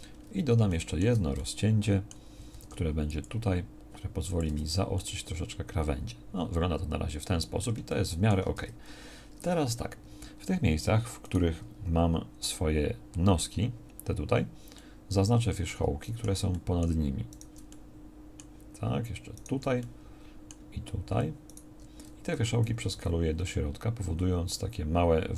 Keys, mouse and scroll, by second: 0.3 Tab, 2.6 ctrl+r, 4.5 Tab, 8.6 Tab, 17.8 right click, 23.0 s.